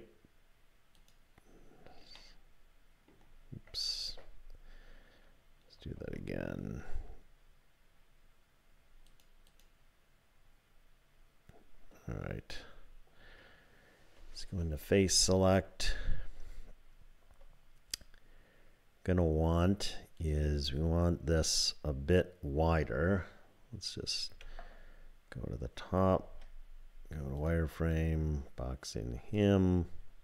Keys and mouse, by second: 2.2 click, 4.0 ctrl+z, 6.0 ctrl+r, 9.5 click, 14.2 3, 24.3 KP_7, 26.3 z, 28.0-30.2 drag.